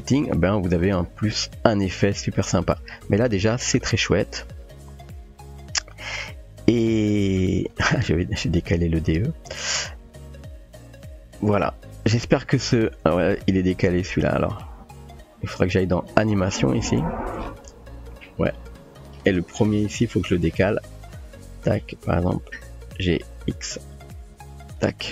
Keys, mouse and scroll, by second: 2.4 click, 8.2 ctrl+space, 12.8 space, 13.1 click, 14.7 typing, 16.0 click, 16.0-16.5 typing, 21.4 click, 23.3 g.